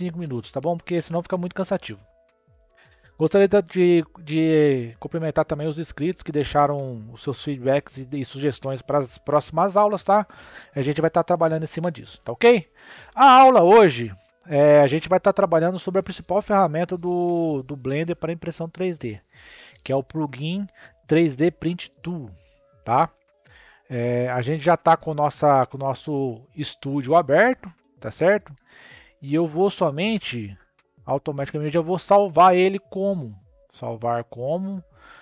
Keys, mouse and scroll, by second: 32.1-35.2 drag.